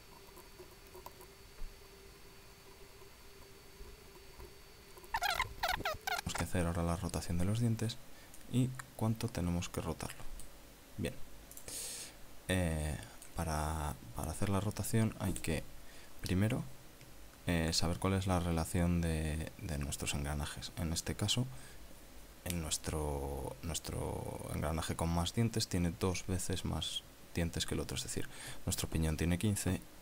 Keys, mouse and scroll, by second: 0.0-1.3 typing, 1.4 click, 1.5 middle click, 1.9 click, 2.2 right click, 2.4 alt+shift+right click, 2.7 right click, 2.9 alt+shift+right click, 3.2 alt+shift+right click, 3.5 f, 3.6 click, 3.8 right click, 4.1 alt+shift+right click, 4.3 click, 4.6 middle click, 4.7 scroll down 1, 4.8 middle click, 5.0 a, 5.2 scroll up 1, 5.6 ctrl+middle click, 5.8 shift+middle click, 6.0 scroll down 1, 6.0 middle click, 9.4-11.6 middle drag, 12.6 click, 13.5 middle click.